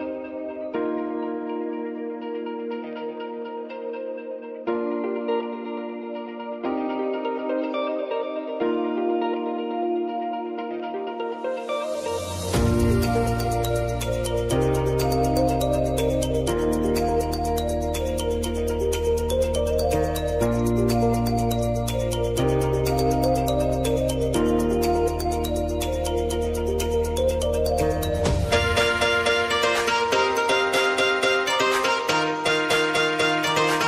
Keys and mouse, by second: 0.1-3.3 drag, 3.3 space, 4.9-6.7 drag, 6.7 space, 9.0 y, 9.5 click, 10.8 w, 11.9-15.5 drag, 15.5 [, 16.0 space, 17.4-18.1 typing, 18.5 ctrl+z, 18.9-20.4 drag, 20.4 s, 20.9 click, 21.7 space, 23.2-25.8 drag, 25.8 [, 26.2 space, 30.1-31.9 drag, 31.9 click, 32.1 space.